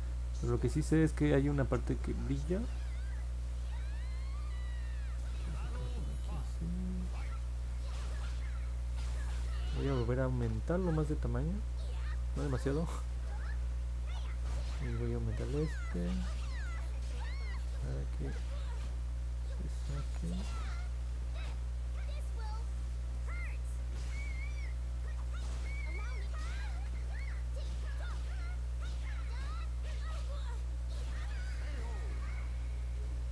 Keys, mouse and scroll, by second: 0.0 click, 0.3 click, 0.8 click, 1.1 click, 1.4 click, 1.7 click, 1.9 click, 2.2 click, 2.5 click, 2.9 click, 3.2 click, 3.5 click, 4.0 click, 4.3 click, 4.6 click, 4.9 click, 5.2 click, 5.6 click, 5.9 click, 6.3 click, 6.6 click, 6.9 click, 7.3 click, 7.6 click, 7.9 click, 15.5 click, 17.0 click, 17.5 click, 18.0 click, 18.4 click, 18.8 click, 19.5 click, 19.9 click, 20.3 click, 20.7 click, 21.1 click, 22.4 click, 23.0 click, 23.6 click, 24.0 click, 24.4 click, 25.1 click, 25.4 click, 25.7 click, 26.0 click, 26.5 click, 26.8 click, 27.3 click, 28.6 click, 28.9 click, 29.2 click, 29.6 click, 30.1 click, 30.8 click, 31.3 click, 31.7 click, 32.0 click, 32.3 click, 32.7 click.